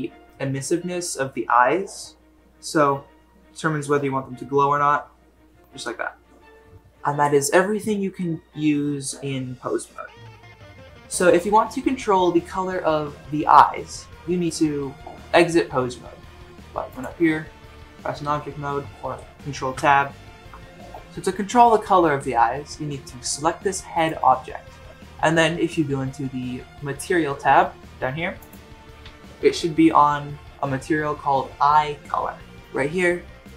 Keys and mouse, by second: 16.9-18.9 drag, 19.8 ctrl+Tab, 24.0 click, 33.4-33.5 drag.